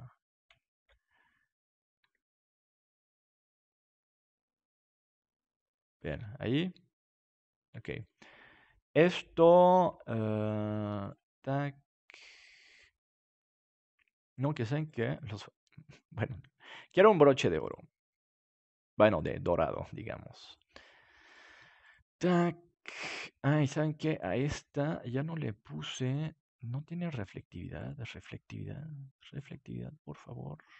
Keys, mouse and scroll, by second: 2.0-3.0 middle drag, 2.0 g, 5.6-8.0 drag, 6.1 Tab, 8.0 middle click, 9.0 right click, 9.7-12.2 drag, 12.2-14.9 right drag, 13.2-15.9 drag, 15.9-17.7 right drag, 16.7-23.0 drag, 18.4-29.4 right drag, 27.3-30.2 drag, 30.2-30.7 middle drag.